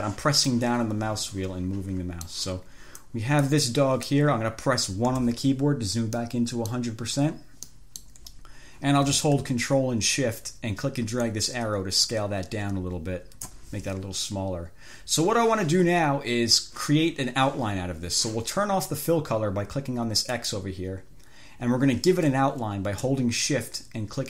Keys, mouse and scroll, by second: 0.8-2.8 drag, 3.3-4.6 drag, 5.4 1, 6.4 click, 7.9 click, 11.4-14.0 ctrl+shift+drag, 20.6 click.